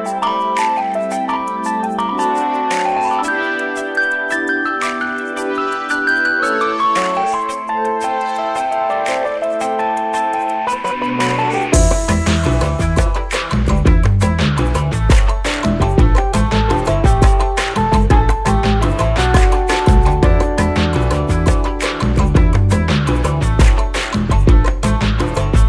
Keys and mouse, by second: 2.1 click, 7.8 click, 9.7 click, 18.4 Down, 20.8-22.3 drag.